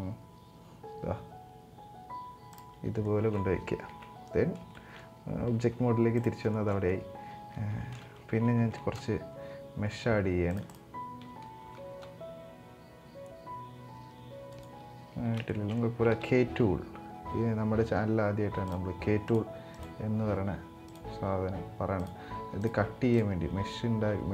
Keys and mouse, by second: 2.8 shift+middle click, 3.6 Tab, 4.5 shift+middle drag, 5.1 g, 6.2 shift+middle click, 7.4 Tab, 8.3 ctrl+r, 15.1 shift+middle click, 16.3 k.